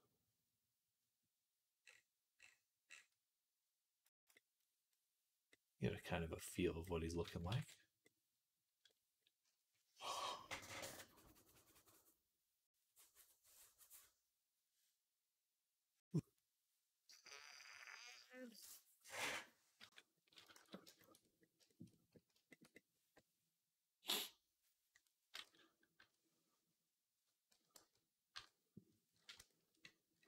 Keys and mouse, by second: 4.4-6.2 middle drag, 6.7 middle click, 7.4 ctrl+s, 8.0 middle click, 8.9-19.9 middle drag, 20.5 ctrl+s, 20.8-27.5 middle drag, 25.8 KP_3, 27.6 KP_1, 28.2 KP_3.